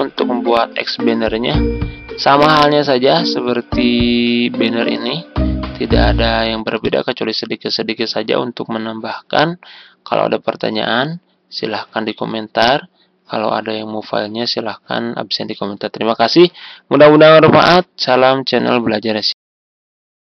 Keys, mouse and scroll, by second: 19.3 End.